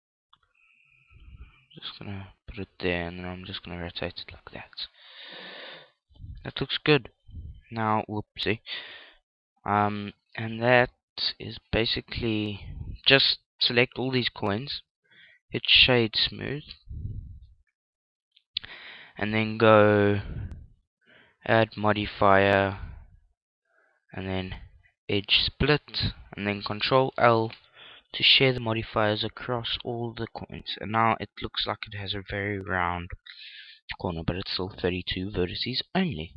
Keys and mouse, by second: 3.1 click, 3.7 r, 6.1 click, 6.3 x, 6.9 x, 8.2 z, 8.6-12.3 middle drag, 14.8-18.5 right drag, 17.8 middle click, 18.6-22.5 drag, 26.9 ctrl+l, 30.7-36.3 middle drag, 35.5 Tab.